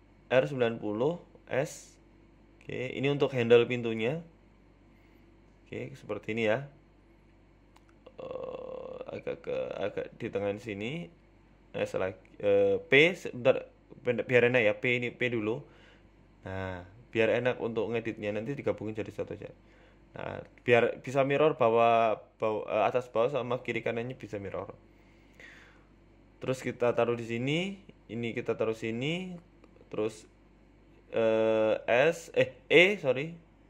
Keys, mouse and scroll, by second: 1.9 r, 3.0 s, 3.7-4.0 scroll up 5, 3.9 shift+middle click, 4.4 g, 5.5-5.9 scroll down 5, 5.9 middle click, 8.2 middle click, 9.0 f, 11.0 g, 12.3 KP_3, 12.6-13.2 scroll up 5, 12.8 shift+middle click, 13.3 shift+middle click, 14.0 p, 14.7 Tab, 15.0 right click, 15.2 Tab, 15.7-16.0 scroll down 3, 15.9 middle click, 17.3 click, 18.0 KP_3, 18.5 scroll up 4, 18.9 shift+middle click, 19.3 click, 19.9 s, 21.3 g, 22.6-23.2 scroll up 7, 22.8 shift+middle click, 23.3 scroll down 1, 24.7 scroll down 2, 24.7 g, 25.6-26.5 scroll up 2, 25.9 click, 26.5 g, 29.0 click, 29.5 g, 30.7 click, 31.3 scroll up 4, 31.4 shift+middle click, 32.5 r, 32.7 s.